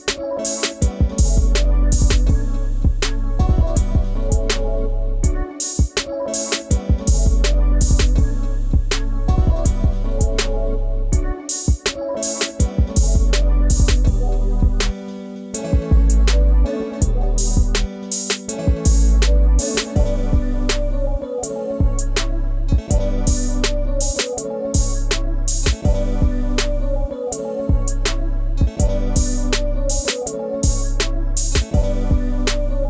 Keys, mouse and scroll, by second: 0.0 ctrl+click, 2.3-3.0 ctrl+scroll up 1, 4.6 space, 4.8 ctrl+click, 12.8 scroll up 1, 13.0 space, 13.1 ctrl+click, 14.5 scroll, 14.8 space, 14.8 ctrl+click, 15.9 ctrl+scroll down 1, 15.9-16.2 scroll up 1, 16.6 scroll down 1, 18.4 scroll down 1, 19.7 shift+click, 22.6 ctrl+z, 23.2 ctrl+space, 23.3 ctrl+click, 23.5 ctrl+space, 24.8 shift+click, 25.4 shift+click.